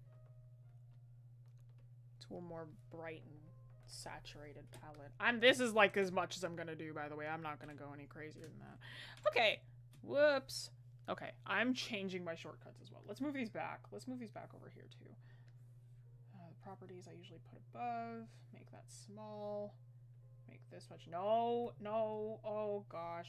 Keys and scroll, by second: 0.2 scroll up 1.